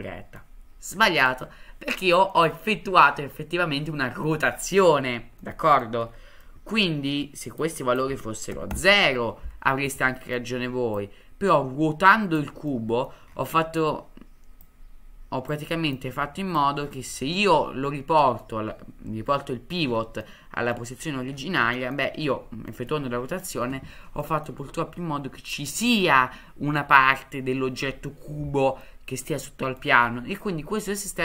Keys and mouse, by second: 2.3-4.3 middle drag, 5.4-5.8 middle drag, 6.4-6.7 middle drag, 7.8-9.4 drag, 9.9-10.3 middle drag, 11.0-12.4 drag, 12.7-13.0 middle drag, 14.8 click, 15.9 click, 17.4-18.4 middle drag, 20.2-20.7 middle drag, 21.7 middle drag, 22.6 middle drag, 24.2 middle drag, 28.9-29.8 middle drag, 30.4-30.8 middle drag.